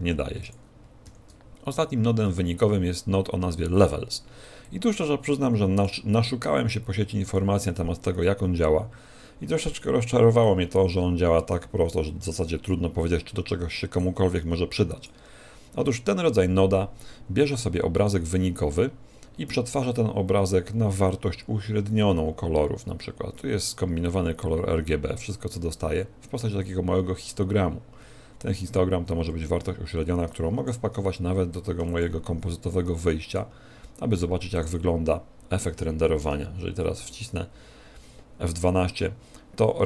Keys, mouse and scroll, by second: 36.8 F12.